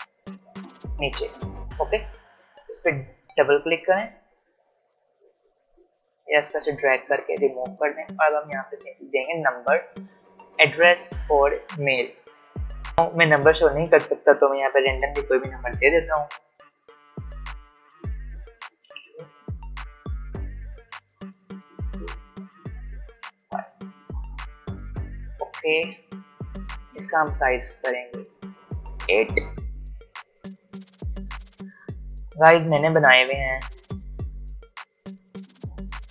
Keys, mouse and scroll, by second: 27.6-36.1 drag, 35.9 ctrl+Num_Lock.